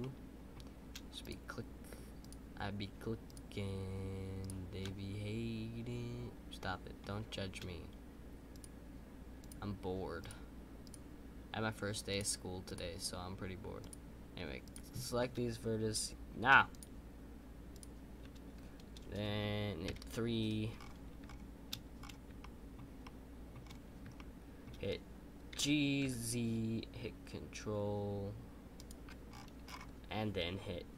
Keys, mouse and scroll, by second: 0.0-1.2 middle drag, 1.2 shift+click, 4.8-7.8 middle drag, 8.5 shift+click, 19.8 KP_3, 20.7-21.9 scroll up 7, 21.9-22.4 scroll up 1, 22.4-23.6 shift+middle drag, 23.6-24.1 scroll up 4, 24.1-25.5 shift+middle drag, 29.3-30.9 scroll down 9.